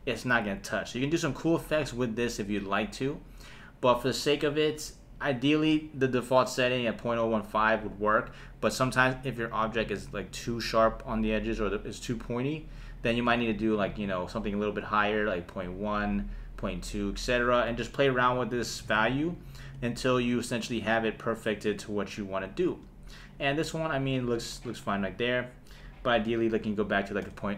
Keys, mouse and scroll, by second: 5.1-17.1 drag, 19.4 shift+Left, 19.7 space, 22.7 space, 26.0-27.5 drag.